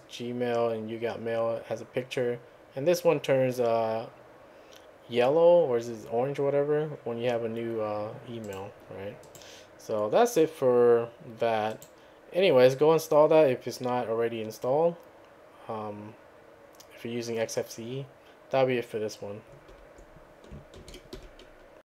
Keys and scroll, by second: 20.8 ctrl+a, 21.2 2.